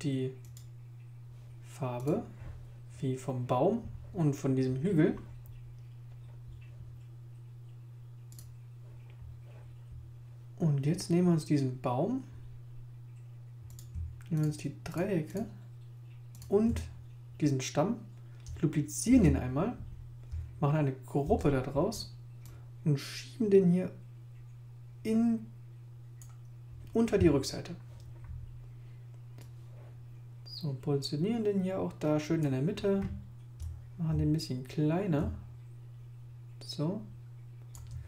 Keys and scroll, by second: 19.0 super+j, 21.2 super+g.